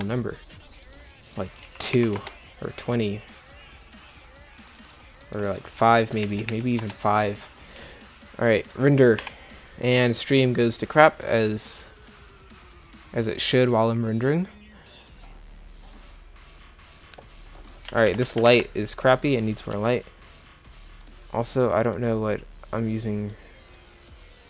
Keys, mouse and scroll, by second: 9.4 F12, 18.1 Escape, 18.2 Escape, 18.4 Escape, 18.5 Escape, 19.7 n.